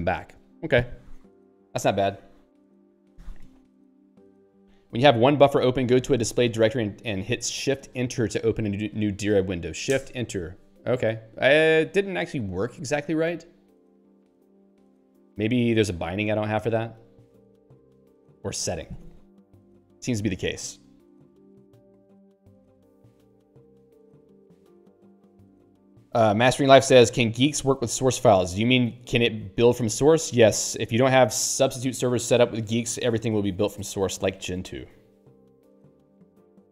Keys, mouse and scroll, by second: 8.8 click, 10.0 Return, 18.0 q.